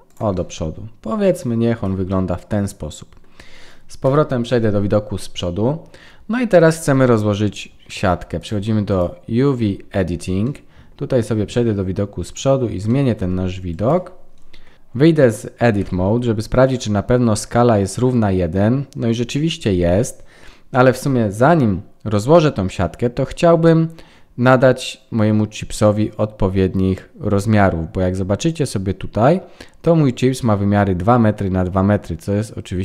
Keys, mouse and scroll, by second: 0.3 middle click, 1.7 Tab, 2.1 middle click, 4.0 KP_1, 8.3 click.